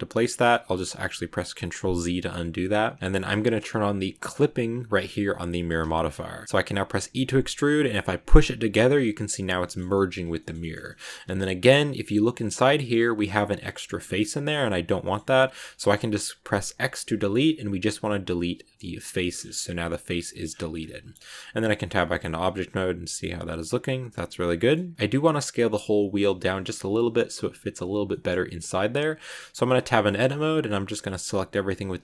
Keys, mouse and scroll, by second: 1.8 ctrl+z, 4.0 click, 6.0 click, 6.9 e, 9.5-10.6 shift+middle drag, 10.6-11.5 shift+scroll up 5, 10.7 middle click, 11.5 middle click, 12.5 scroll up 1, 12.5 scroll down 1, 12.5 middle click, 13.2-13.9 scroll up 1, 13.9 scroll down 4, 14.2 middle click, 14.5-14.9 scroll up 1, 14.9-16.7 shift+middle drag, 16.7 x, 19.1 middle click, 19.3 scroll up 5, 19.5 middle click, 20.3-20.7 scroll down 11, 20.8 middle click, 21.7 Tab, 21.8 middle click, 22.2 scroll up 1, 22.3-24.9 middle drag, 24.9 scroll up 1, 25.0-27.9 middle drag, 27.9 scroll down 1, 29.1 Tab, 29.6 middle click, 30.1 a, 30.4 a, 31.1-32.0 middle drag.